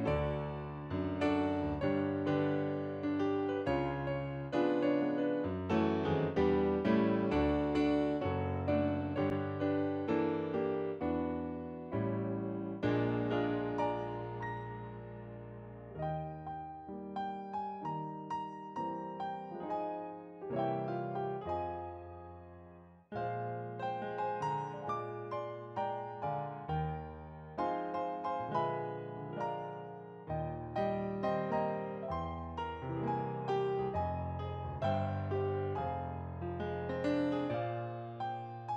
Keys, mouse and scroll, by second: 5.9 scroll down 1, 6.0 alt+click, 7.2-8.4 scroll up 1, 9.7 scroll down 1, 10.6 scroll up 1, 14.3 scroll down 1, 15.2 alt+click, 18.7 shift+2, 20.1 alt+click, 22.0 alt+click, 26.7 alt+click.